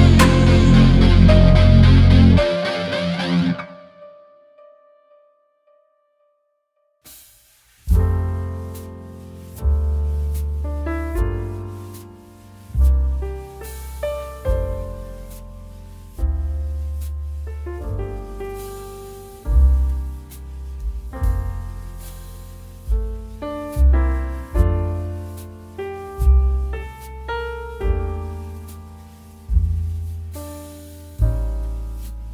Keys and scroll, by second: 18.2 Right, 20.5 Delete, 22.0 ctrl+z, 24.0 ctrl+d, 25.1 ctrl+alt+z, 30.6 ctrl+t.